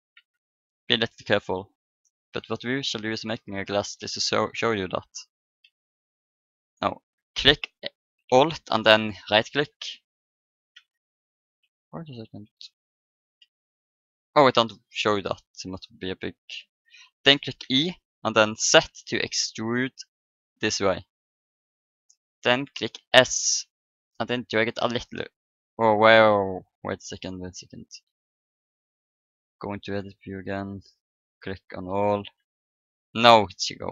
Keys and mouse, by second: 0.1 ctrl+z, 1.3-5.7 drag, 4.0 a, 6.4-8.1 drag, 10.0-12.1 middle drag, 12.1 a, 14.2-16.1 drag, 15.4 right click, 16.1-17.5 middle drag, 17.6 e, 22.4 middle click, 23.2 s, 23.3-24.4 middle drag, 27.5 Tab, 30.3-32.2 drag, 31.7 Tab.